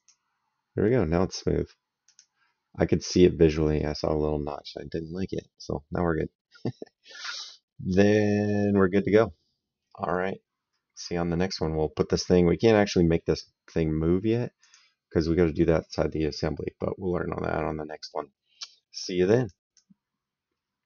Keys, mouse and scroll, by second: 1.9 click, 3.6 right click, 6.0 right click, 14.4 click, 19.3 click.